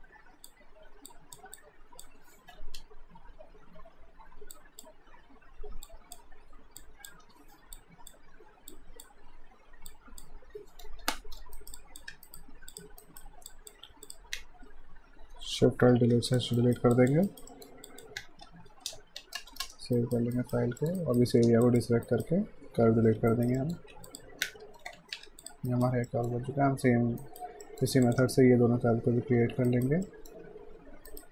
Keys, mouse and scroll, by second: 1.6 alt+click, 2.8 Return, 4.6 click, 7.2 Return, 7.8 alt+click, 11.0 Return, 11.6 alt+right click, 11.8 alt+click, 12.3 right click, 12.7 click, 13.0 alt+right click, 13.5 alt+click, 15.9 d, 16.3 click, 16.6 alt+right click, 17.0 alt+click, 17.3 alt+right click, 17.5 alt+middle click, 17.9 click, 18.5 alt+shift+d, 19.0 ctrl+s, 19.4 space, 20.0 alt+right click, 20.8 alt+middle click, 21.0 alt+right click, 21.6 ctrl+click, 22.1 alt+right click, 23.3 alt+right click, 23.6 alt+middle click, 23.9 alt+q, 24.1 click, 24.6 alt+shift+d, 25.0 ctrl+shift+s, 25.4 click, 25.7 right click, 26.1 middle click, 27.2 right click, 27.6 middle click, 28.0 click, 29.7 alt+right click, 30.1 alt+middle click, 31.1 right click.